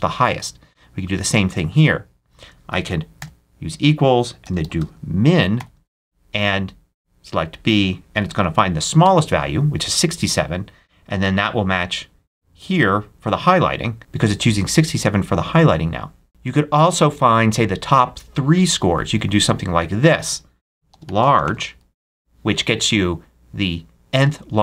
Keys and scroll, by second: 2.6 super+a, 3.1 super+=, 3.7-5.4 typing, 8.0 shift+0, 8.9 shift+Return, 20.7 shift+super+a, 20.8 shift+super+l, 20.8-22.3 typing.